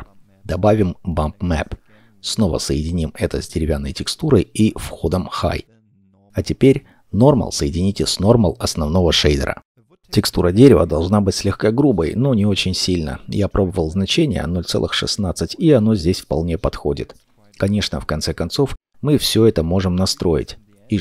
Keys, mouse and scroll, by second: 0.6 middle click, 0.9-2.9 scroll down 1, 3.4 scroll up 1, 4.3 middle click, 6.9 scroll down 1, 7.4 middle click, 9.6-12.9 scroll up 1, 13.9 6, 13.9 6, 14.2 Return, 16.2 middle click, 20.1-20.7 scroll down 1, 20.7 middle click.